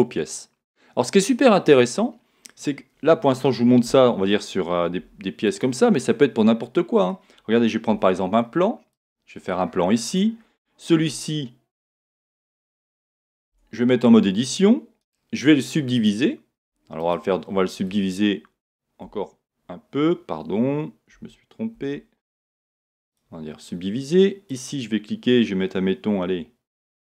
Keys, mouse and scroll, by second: 3.9 Tab, 5.0 x, 6.0-9.9 middle drag, 7.9 shift+a, 9.4-9.9 scroll down 2, 9.9-10.3 scroll up 1, 10.5-15.0 middle drag, 10.5-11.0 scroll up 1, 11.0 w, 13.5 Tab, 15.0-17.2 right drag, 17.2 click, 17.4-22.4 middle drag, 19.0 w, 21.1 Escape, 22.4-24.6 right drag, 24.6 click, 26.8 click.